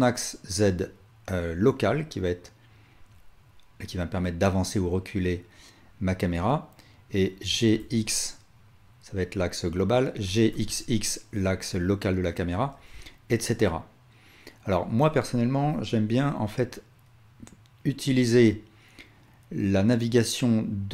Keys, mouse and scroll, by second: 7.5 g, 10.2 g, 13.0-20.9 alt+shift+drag.